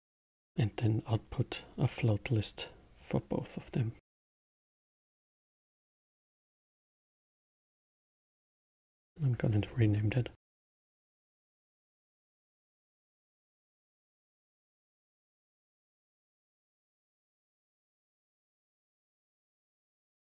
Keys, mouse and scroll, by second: 2.9 click, 4.4 click, 5.5 shift+d, 7.0 click, 8.3 click, 9.0-12.2 drag, 15.9 click, 16.6-19.7 drag.